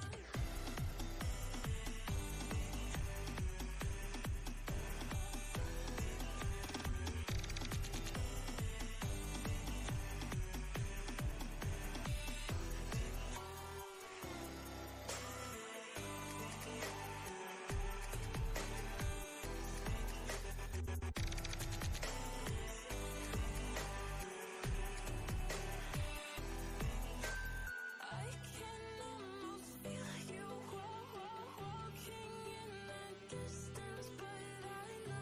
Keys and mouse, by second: 0.2 click, 4.0-6.6 drag, 13.0 click, 16.4 ctrl+a, 17.5 ctrl+c, 18.9 click, 22.2 ctrl+v, 23.8-24.5 typing, 26.1-26.8 typing, 26.3 click, 33.8-35.2 typing, 35.0 click.